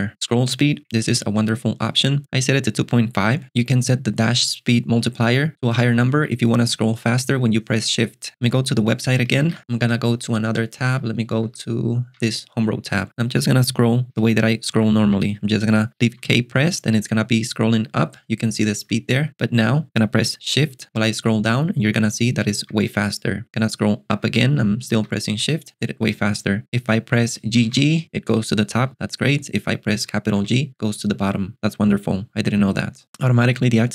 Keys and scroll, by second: 0.1 Escape, 10.5 shift+super+[, 14.2 ctrl+alt+shift+super+6, 14.7 j, 16.2 k, 18.9 k, 22.0 shift+j, 24.2 shift+k, 27.5 g, 30.4 shift+g.